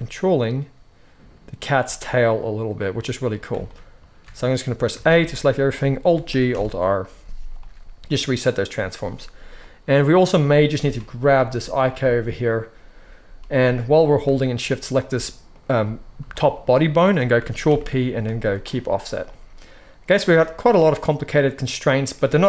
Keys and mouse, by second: 4.9 a, 6.2 alt+g, 6.4 alt+r, 9.5-11.8 drag, 10.7 alt+a, 11.8-22.4 shift+middle drag, 13.3 g, 17.6 ctrl+p.